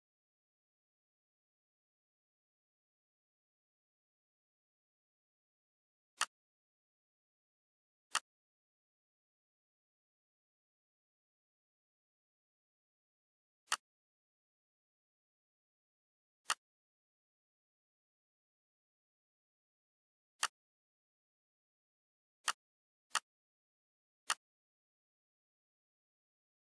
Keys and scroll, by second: 1.1 F4, 3.0 shift+F4, 21.5 F4.